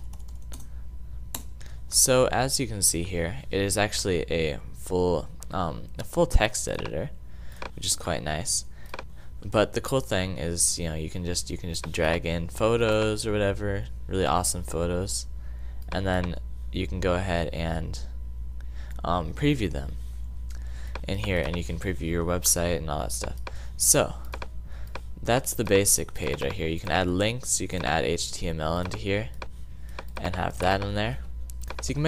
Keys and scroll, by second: 0.0-0.6 typing.